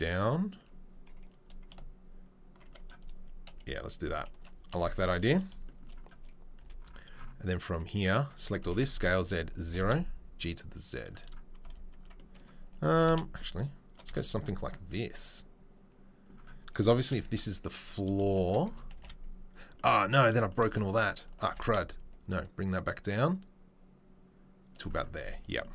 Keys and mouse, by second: 2.6-25.7 shift+middle drag, 3.5 KP_3, 4.3 1, 4.7 KP_1, 6.6 c, 8.6 s, 9.5 g, 11.6 Tab, 11.9 Tab, 12.8 g, 14.0 z, 17.1 KP_3, 18.9 g.